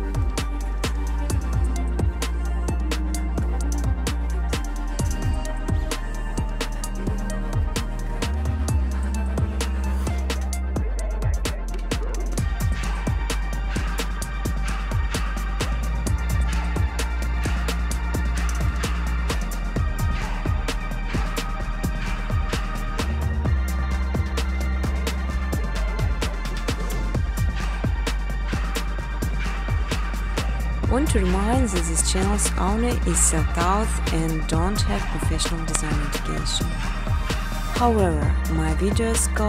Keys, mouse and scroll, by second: 2.3 click, 3.2 click, 4.2 click, 4.6-6.0 typing, 6.7 Tab, 7.4-9.5 typing, 7.9 click, 14.6 click, 15.5 click, 16.4 Tab, 16.8-17.7 typing, 18.2 click, 19.9-25.5 typing, 20.8 alt+click, 25.2 click, 26.9 space, 27.1 space, 28.0 space, 33.2 alt+click, 33.7-37.0 typing, 36.7 click, 38.3 space.